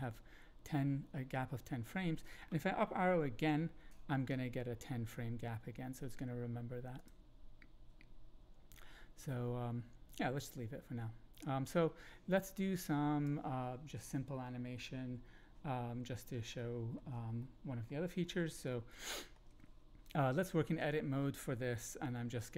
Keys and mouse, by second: 3.3 Up, 6.9 click, 8.4 x, 10.4-13.2 drag, 16.5-16.9 shift+middle drag, 17.4 middle click, 18.9 shift+middle click.